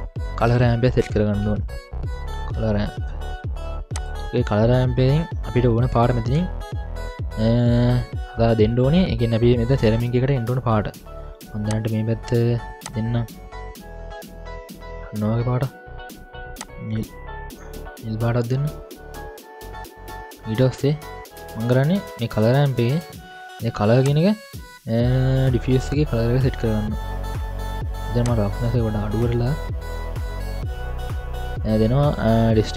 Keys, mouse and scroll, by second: 0.2 middle click, 0.4 ctrl+alt+a, 5.1-5.6 scroll up 1, 7.0-7.4 scroll down 4, 7.4 scroll up 4, 9.6-10.8 middle drag, 11.7 click, 12.9 click, 14.0 drag, 14.8-17.6 drag, 24.0-26.2 drag, 28.2-30.9 drag, 31.0-32.7 drag.